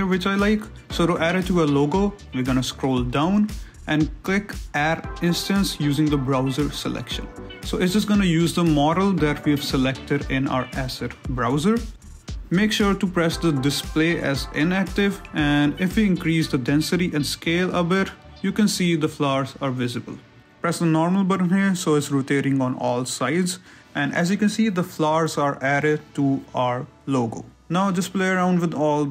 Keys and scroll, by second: 9.6 z.